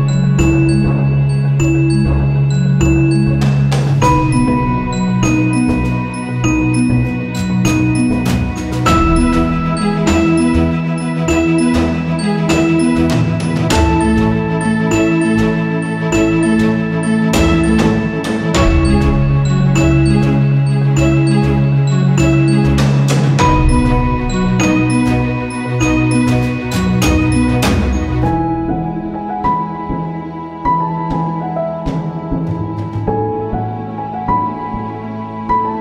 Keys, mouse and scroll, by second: 2.9 ctrl+z, 3.6 ctrl+a, 4.0-5.7 drag, 5.7 ctrl+z, 7.6 click, 9.3-13.2 shift+drag, 18.6 space, 19.1 click, 20.0-23.2 shift+drag, 24.2 ctrl+=, 25.5-29.8 drag, 30.0 space, 30.1 click, 30.3 space, 31.5 click, 31.8 ctrl+c, 32.3 ctrl+v, 33.0-35.8 drag.